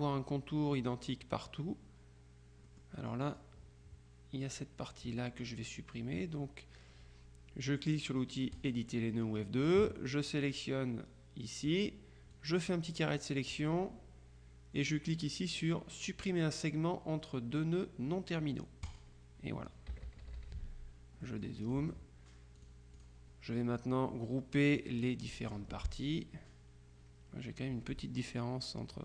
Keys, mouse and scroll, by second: 2.8-4.0 drag, 8.6 click, 10.5 click, 12.4-13.7 drag, 18.9 click, 20.0 KP_Subtract, 21.3 middle click, 21.6 click, 22.7 click, 25.1 click, 27.8 F2.